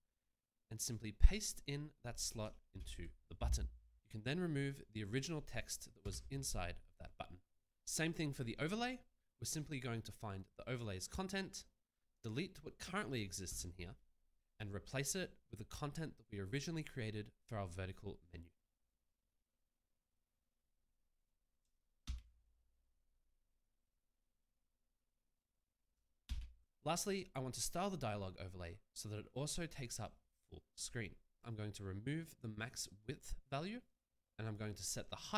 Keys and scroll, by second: 3.1 ctrl+v, 6.4 BackSpace, 13.9 BackSpace, 22.4 ctrl+c.